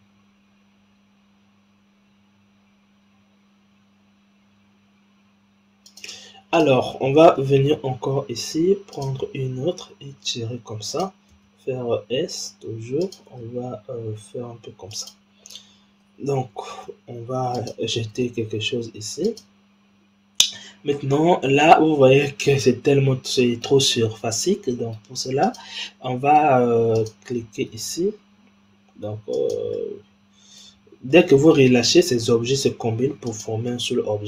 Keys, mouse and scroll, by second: 6.5 click, 7.5 shift+d, 9.0 shift+d, 11.2 s, 13.3 g, 16.6 shift+d, 18.1 s, 20.3-23.3 middle drag, 23.9-25.4 middle drag, 25.4 click, 25.8-26.9 middle drag, 26.9 click, 27.6 shift+d, 29.6-31.7 middle drag, 31.7 g, 33.6-34.2 middle drag.